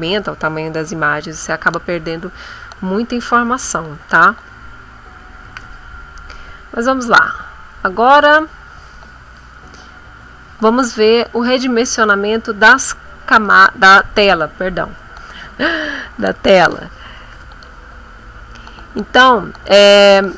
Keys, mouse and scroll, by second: 5.4 ctrl+z, 7.2 scroll up 2, 8.7 click, 13.5 click, 15.0 click.